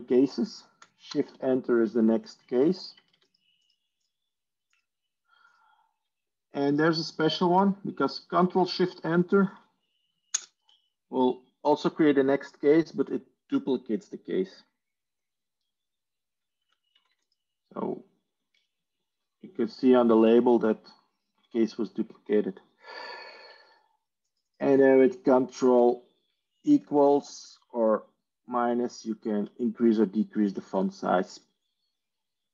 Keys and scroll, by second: 1.0 shift+Return, 2.5 b, 3.6 Tab, 8.3 Tab, 9.2 Tab, 10.3 ctrl+shift+Return, 16.5 typing, 17.7 Tab, 18.1-18.8 typing, 26.9 ctrl+=, 28.3 ctrl+-, 28.9 ctrl+-.